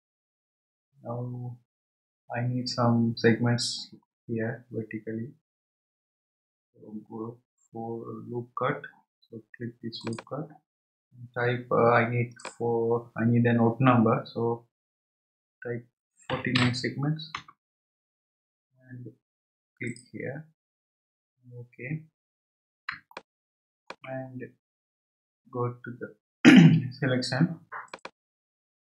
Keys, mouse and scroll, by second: 10.0-15.5 drag, 19.9-20.7 drag, 20.7-21.6 scroll up 4, 21.6 scroll up 3, 23.1-24.4 shift+middle drag, 24.4-25.0 scroll down 1, 27.9-28.9 drag.